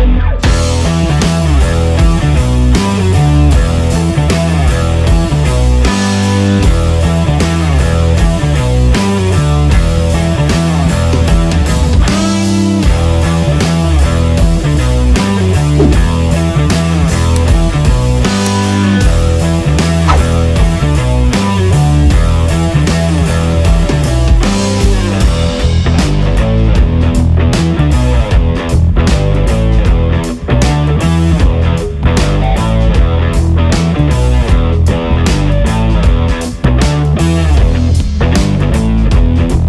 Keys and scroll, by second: 0.8 alt+space, 1.6 space, 3.9 space, 4.7 b, 4.7 space, 7.0 space, 11.6-11.9 ctrl+KP_Subtract, 13.5 ctrl+KP_Add, 13.5 ctrl+KP_Add, 13.6 ctrl+KP_Add, 13.7 ctrl+KP_Add, 13.9 ctrl+KP_Add, 14.0 ctrl+KP_Add, 14.1 ctrl+KP_Add, 16.5 ], 16.7 space, 17.6 space, 18.5 space, 19.6 space, 20.5 space, 21.7 space, 23.6 space, 24.6 space, 25.4 space, 26.7 space, 28.2 space, 29.7 space, 31.7 space, 33.2 KP_Subtract, 33.4 KP_Subtract, 33.5 KP_Subtract, 33.7 s, 37.7 KP_Subtract, 37.7 KP_Subtract, 37.8 KP_Subtract, 37.9 KP_Subtract.